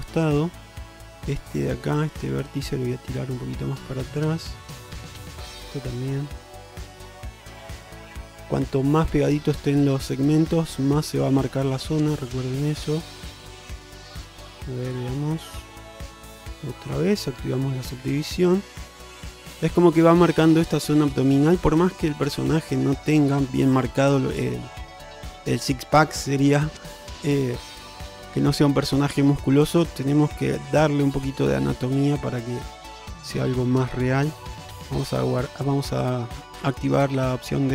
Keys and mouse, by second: 1.0 click, 1.2-1.8 alt+middle drag, 2.2 alt+middle click, 3.0-4.3 drag, 4.7 click, 5.2 click, 6.0 shift+middle drag, 6.6 click, 7.1 click, 8.4 click, 9.0-10.2 drag, 10.5 shift+middle click, 11.2 click, 11.9 click, 13.6 click, 14.5-16.2 middle drag, 17.0 click, 17.4 Tab, 18.2-18.6 middle drag, 19.0 shift+middle drag, 19.4 middle click, 21.6 alt+middle click, 22.6 shift+middle drag, 29.0 shift+middle click, 33.6 shift+middle drag, 34.8 click, 35.7 shift+middle drag.